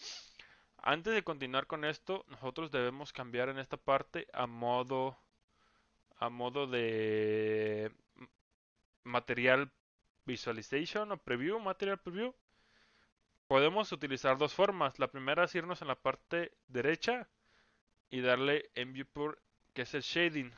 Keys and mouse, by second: 2.8-3.8 middle drag, 6.2 click, 18.8 click.